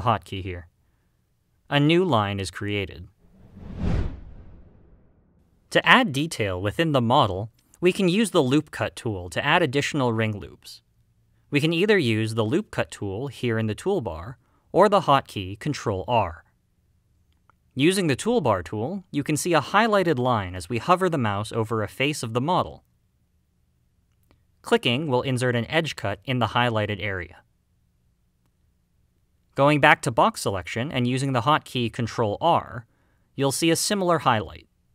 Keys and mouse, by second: 1.5 e, 2.2 click, 18.1 click, 25.6 click, 28.1 middle click, 30.7 click, 32.4 ctrl+r.